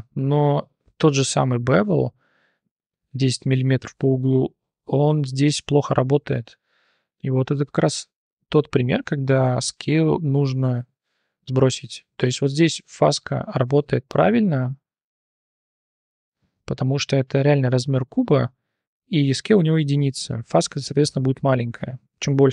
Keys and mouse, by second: 0.4 click, 0.9 click, 6.7-7.3 drag, 7.0 middle click, 7.0 right click, 7.6 click, 7.6 middle click, 7.6 right click, 9.1 shift+click, 9.6 click, 12.1 click, 15.8 shift+drag.